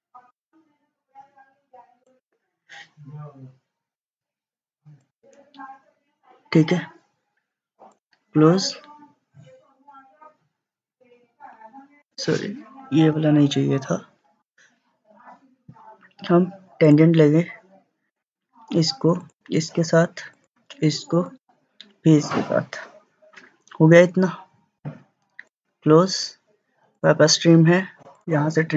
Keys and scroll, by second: 13.2 Delete.